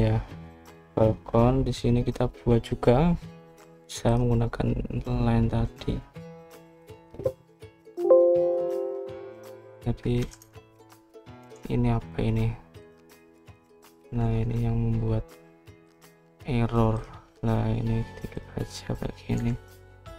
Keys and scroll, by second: 11.1 Escape, 11.3 Escape, 12.3 Escape, 14.0-14.9 typing.